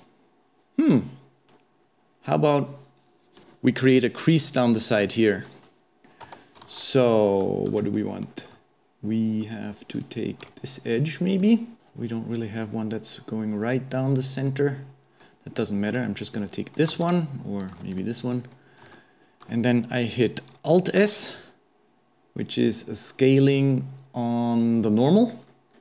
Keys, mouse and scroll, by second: 5.1-6.3 middle drag, 6.3 Tab, 6.6 alt+a, 8.0-10.0 middle drag, 10.0 alt+shift+click, 11.4 middle click, 14.5-16.9 middle drag, 16.9 alt+a, 17.6 alt+shift+click, 18.0 middle click, 18.6-18.9 scroll up 2, 18.9-20.0 shift+middle drag, 20.0-21.0 scroll down 1, 21.0 alt+s.